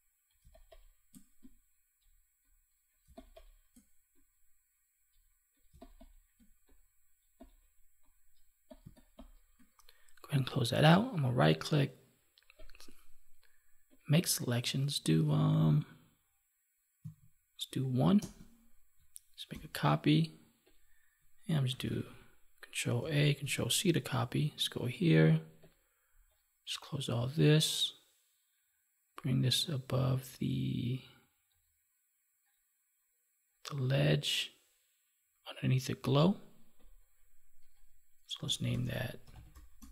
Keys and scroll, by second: 0.3 space, 3.0 space, 5.6 space, 8.8 space, 19.4 ctrl+j, 21.6 ctrl+-, 24.1 ctrl+Tab.